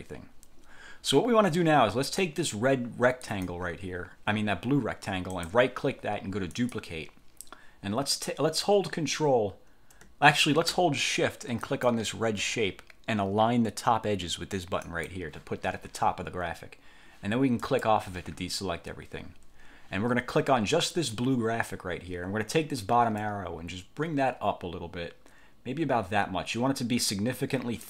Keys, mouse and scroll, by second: 3.4 click, 5.5 click, 6.7 click, 11.8 shift+click, 15.0 click, 17.7 click, 21.1 click, 23.3-27.8 drag.